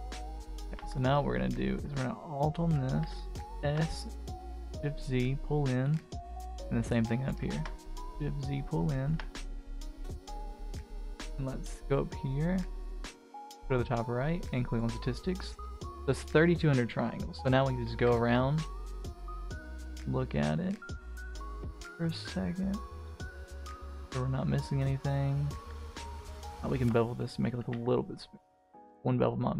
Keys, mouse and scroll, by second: 0.3 click, 0.5-1.8 scroll up 2, 0.7 Tab, 2.0 alt+click, 3.0 s, 6.1 alt+click, 7.1 s, 9.1 Tab, 9.3-10.6 middle drag, 10.6-11.8 scroll down 3, 11.8 click, 12.2 click, 13.9-15.1 drag, 15.7 middle drag, 16.4-16.8 middle drag, 17.5 middle drag, 18.2 Tab, 18.6 scroll up 1, 18.7 middle click, 19.4-21.8 middle drag, 21.8 Tab, 22.2-23.4 middle drag, 23.5-25.6 middle drag, 25.7 Tab, 26.0-26.3 scroll up 1, 26.6 alt+click, 27.0 middle click, 27.6 ctrl+b.